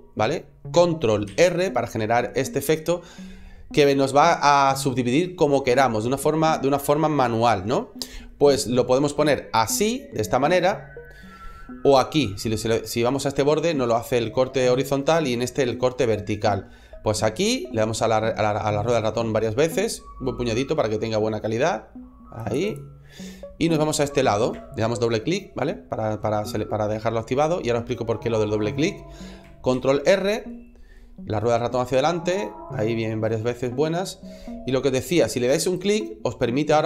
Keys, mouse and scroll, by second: 22.5 click, 23.1 middle click, 26.4 middle click, 29.4 ctrl+r.